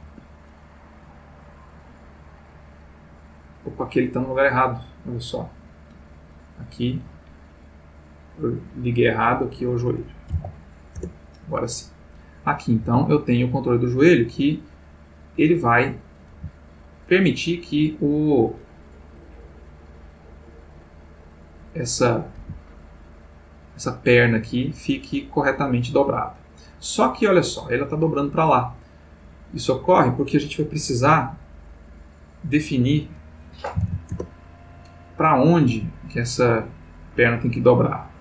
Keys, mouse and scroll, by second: 0.0 Escape, 1.6 click, 3.7 click, 5.0 click, 6.3 click, 7.8 click, 8.6 click, 9.4 click, 10.3 j, 10.9 Return, 12.2 click, 12.8 g, 15.3 click, 16.1 click, 16.3 g, 20.6 click, 22.4 g, 28.3 click, 32.1 click, 33.8 9, 33.8 0, 34.1 Return, 35.5-37.1 middle drag, 38.0 click.